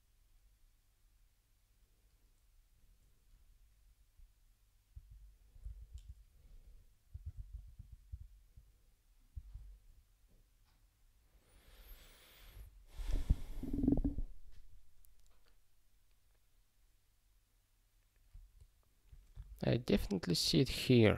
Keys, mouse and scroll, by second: 4.9 super+o, 19.5 alt+<.